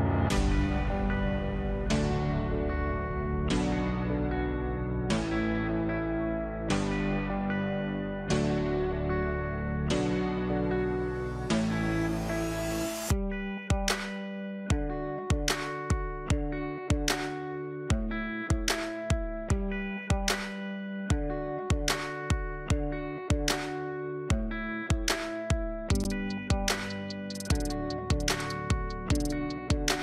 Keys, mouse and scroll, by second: 0.9 alt+click, 4.5 click, 5.8 alt+click, 7.3 click, 10.6 alt+click, 13.4-23.8 drag, 25.1 alt+click, 25.8 alt+click, 27.3-30.0 drag.